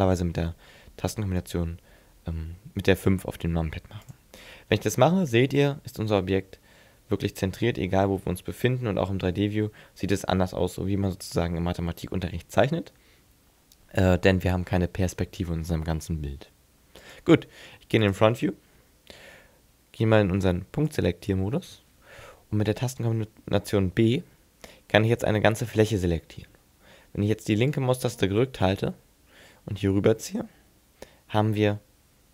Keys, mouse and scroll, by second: 5.2 shift+middle click, 8.4 middle click, 10.3-12.1 scroll up 3, 17.0 click, 18.1 click, 20.9 click, 24.0 b.